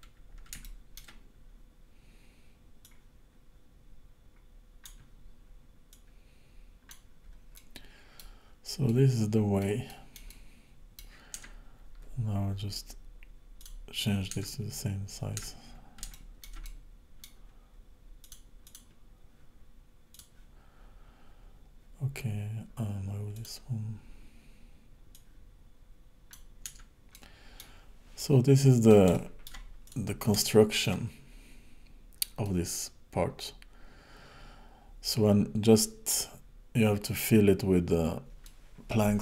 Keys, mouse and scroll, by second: 0.7 shift+middle click, 1.2-2.9 scroll down 1, 2.9 click, 5.9 click, 7.6 middle click, 8.4-8.9 scroll down 4, 8.9 middle click, 9.9 middle click, 10.4 middle click, 11.4 Tab, 13.6 click, 14.4 Tab, 15.5 Tab, 16.2 shift+middle click, 16.7 middle click, 18.3 click, 18.7 click, 20.2 click, 23.4 click, 25.2 click, 26.7 Tab, 27.2 middle click, 27.9 scroll down 1, 28.2 middle click, 29.2 shift+middle click, 29.9 click, 30.4 shift+middle click, 32.5 middle click, 38.4 middle click.